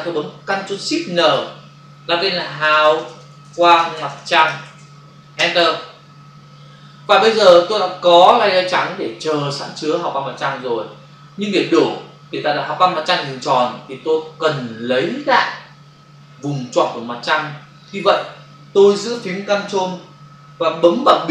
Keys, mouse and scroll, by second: 1.4 ctrl+shift+n, 2.4-4.0 typing, 5.3 shift+Return.